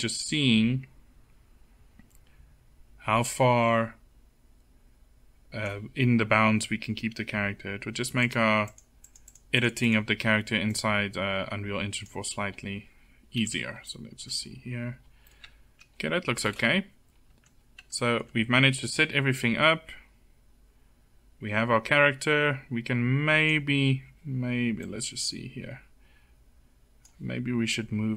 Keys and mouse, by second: 7.7-11.9 drag, 11.9 middle click, 11.9 click, 15.9 KP_0, 18.8-20.4 middle drag, 20.4 click, 24.3-26.1 drag, 28.0-28.1 drag.